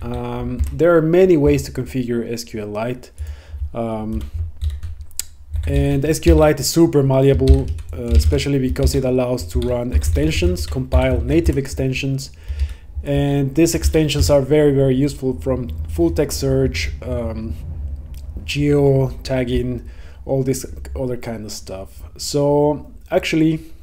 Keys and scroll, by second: 0.7 Return, 4.2 Return, 8.9 Right, 11.6 Return, 12.7 Down, 14.0 Up, 14.3 Tab.